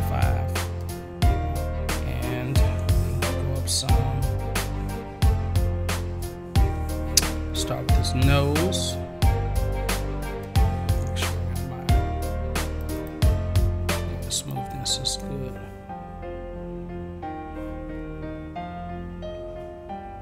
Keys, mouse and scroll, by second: 3.9-4.3 scroll down 1, 12.8 click, 13.0 click, 14.3 click, 19.3-20.2 drag.